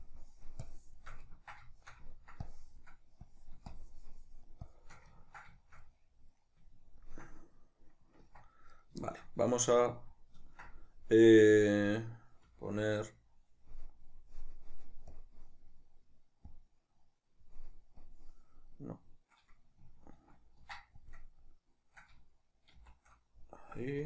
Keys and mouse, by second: 1.3-2.5 ctrl+middle drag, 2.5-5.2 drag, 5.2-8.8 ctrl+middle drag, 8.3 Tab, 8.8 right click, 9.1-15.2 shift+middle drag, 15.2-19.0 drag, 19.0-24.0 middle drag, 20.2 ctrl+a, 22.8 shift+c.